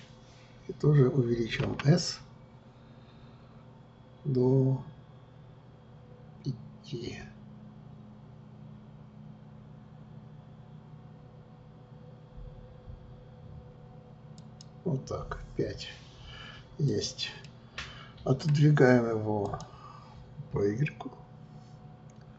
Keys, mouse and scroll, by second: 1.6 s, 16.8 click, 17.4-19.4 middle drag, 19.4-22.3 drag.